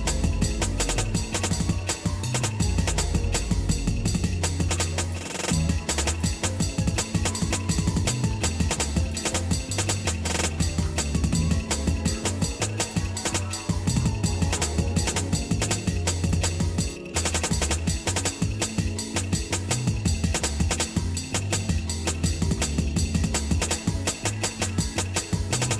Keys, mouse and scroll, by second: 2.8 scroll up 1, 3.4 scroll up 1, 4.1 scroll up 1, 4.5 ctrl+Tab, 6.1 click, 8.3 alt+m, 9.2 click, 10.7 ctrl+Tab, 12.3 click, 12.8 shift+click, 13.8 ctrl+x, 14.4 ctrl+Tab, 16.8 alt+shift+click, 17.6-18.2 scroll down 4, 18.2 shift+middle click, 19.3 middle click, 20.0 shift+middle click, 20.8 scroll up 1, 21.1 scroll down 1, 22.1 alt+shift+click, 22.7 shift+middle click, 23.9 middle click, 25.5 ctrl+b.